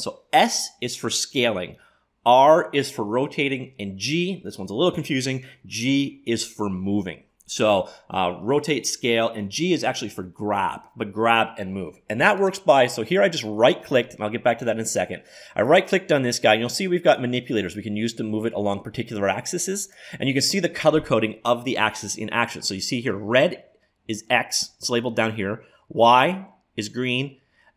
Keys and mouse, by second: 12.5-14.4 drag, 17.2-19.1 drag.